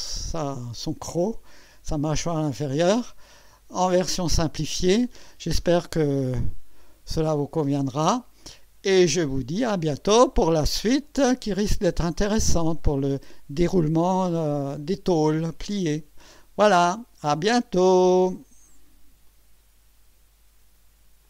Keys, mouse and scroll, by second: 0.3-3.3 drag, 5.4 scroll down 1, 6.5 scroll down 1, 6.8 scroll up 1, 7.7-8.9 drag, 9.1 right click, 9.9-12.4 drag.